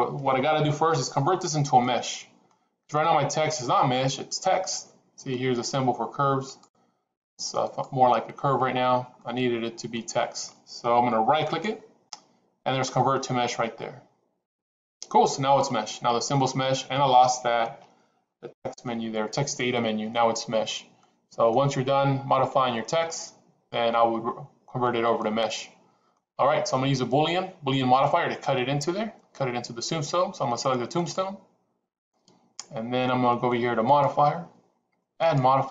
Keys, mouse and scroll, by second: 1.7-2.4 middle drag, 6.3 click, 7.6 click, 9.1-10.3 middle drag, 11.3-14.6 right drag, 21.0 middle click, 25.0-26.1 middle drag, 30.8 click, 33.8 click, 35.3-35.7 drag.